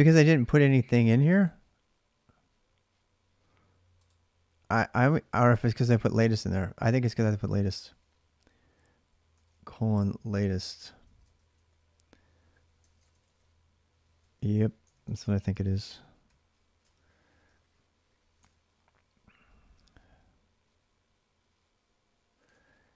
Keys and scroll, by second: 5.9 alt+Tab, 7.3 ctrl+[, 7.4 ctrl+j, 7.7-11.5 typing, 12.6 ctrl+[, 12.8 typing, 13.0 Return, 14.9 ctrl+[, 15.0-17.7 typing, 15.3 Return, 15.6 ctrl+a, 16.6 ctrl+[, 18.1 alt+Tab, 22.2 alt+Tab.